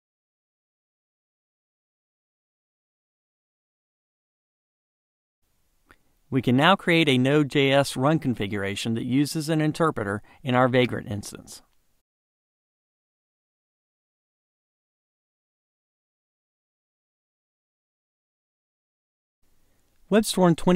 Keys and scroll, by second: 0.8 Up, 19.1 ctrl+r.